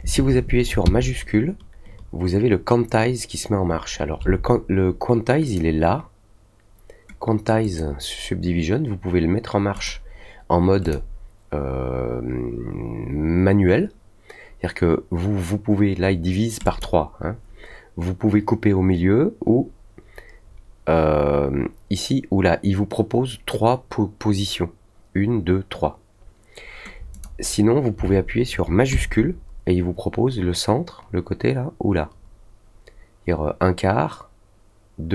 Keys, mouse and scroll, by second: 5.4 click, 7.6 click, 9.7 click, 10.8 click, 16.6 click, 27.1 click.